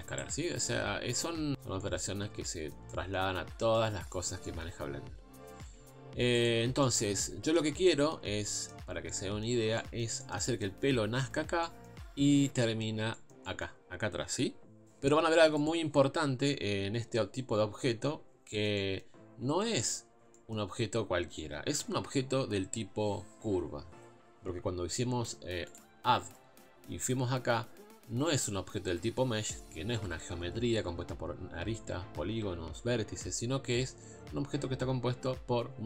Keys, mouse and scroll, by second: 2.9 middle click, 3.4 scroll down 3, 3.6 middle click, 4.1-4.9 scroll up 3, 4.5 middle click, 5.6 z, 6.8 middle click, 7.5 scroll up 1, 7.7 scroll down 2, 7.9-15.5 middle drag, 9.7 scroll up 1, 15.5-35.8 drag.